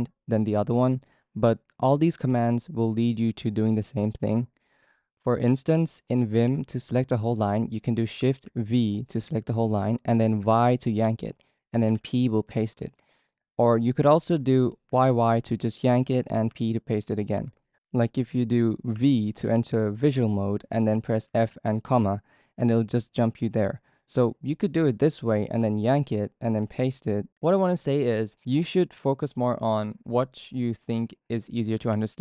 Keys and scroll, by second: 8.4 shift+v, 10.4 typing, 11.9-13.7 typing, 14.9 typing, 16.5-18.9 typing, 21.0-21.8 typing, 25.6 typing, 27.0-30.1 typing, 31.7 typing.